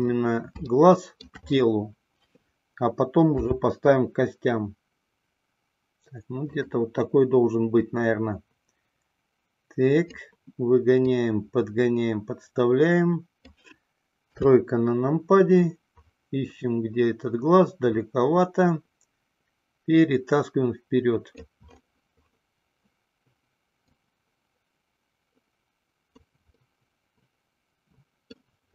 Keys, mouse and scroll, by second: 1.1-1.5 shift+middle drag, 3.5 s, 6.8 click, 8.1-10.3 drag, 11.3-13.9 drag, 14.6 KP_3, 18.2-21.8 drag, 24.1-26.5 drag, 26.9-28.7 middle drag.